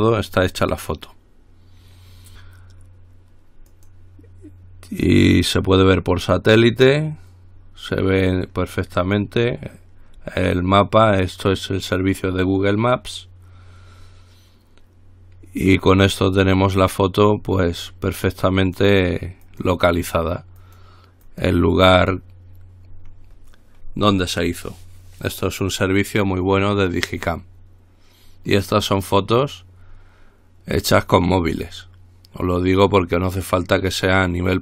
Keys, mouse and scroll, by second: 0.2 click, 4.0 click, 6.0 click, 18.9 click, 20.8 click.